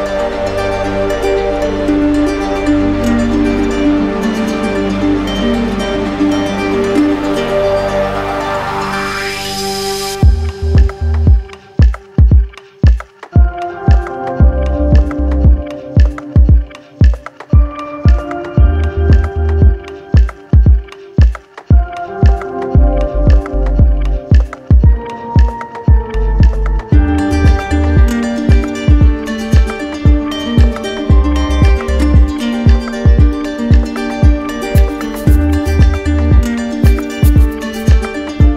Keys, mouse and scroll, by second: 0.5 alt+right click, 0.8 ctrl+s, 1.4 click, 1.5 shift+click, 4.7 click, 8.9 click, 11.0 click, 11.6 alt+click, 12.6 click, 13.8 click, 14.7 click, 14.7 d, 14.8 d, 17.6-20.0 drag, 20.4 click, 22.6-23.6 right drag, 26.5-27.6 drag, 35.4 click, 36.9 click, 37.7 click.